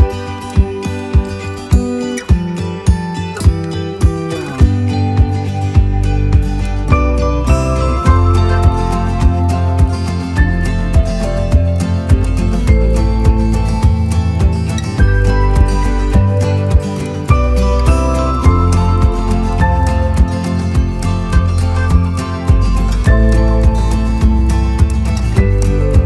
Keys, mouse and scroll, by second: 13.5-13.9 scroll down 1, 22.3 click.